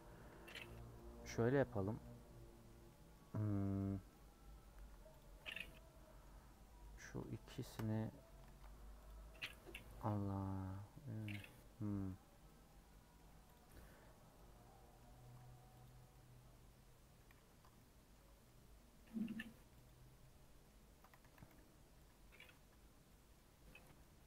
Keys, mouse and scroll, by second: 0.0 middle click, 0.7 3, 0.9 middle click, 1.3 scroll up 2, 2.0 middle click, 2.8-3.2 scroll down 2, 2.9 middle click, 3.4-5.2 middle drag, 5.7 middle click, 6.4-6.8 scroll up 3, 6.8 middle click, 7.6 alt+shift+click, 8.5 ctrl+z, 9.1 alt+click, 10.7 middle click, 11.5-12.1 scroll down 2, 11.7 middle click, 12.1 middle click, 12.4-12.9 scroll up 2, 12.4 middle click, 12.9 middle click, 13.5 alt+click, 14.3-15.8 middle drag, 15.8 alt+click, 16.1-17.5 middle drag, 17.5 Tab, 17.8 middle click, 18.2 Tab, 18.5-19.9 middle drag, 19.9 click, 20.2 middle click, 21.1 a, 22.7 Tab, 22.9 scroll down 3, 23.1 middle click, 23.4 Tab, 23.6 middle click, 24.1 scroll up 2.